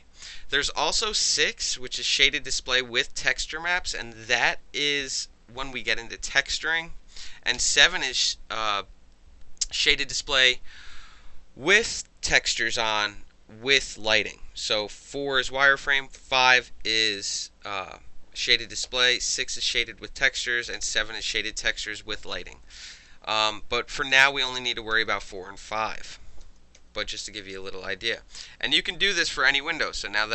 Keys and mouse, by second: 1.0 4, 4.4 middle click, 7.6 6, 15.2 5, 16.2 6, 18.8 7, 20.7 7, 23.9-28.7 typing, 30.2-30.3 alt+drag.